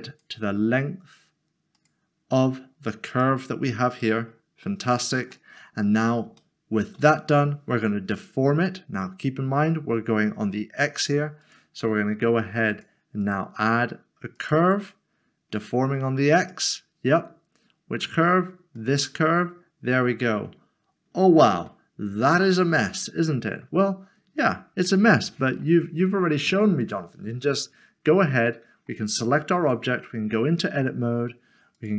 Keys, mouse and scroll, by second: 0.1 click, 4.0 click, 4.9 click, 5.2 middle click, 6.4 shift+middle click, 11.4 click, 18.8 click, 21.7 middle click, 26.8 middle click, 28.4 click, 28.7 middle click, 31.8 click.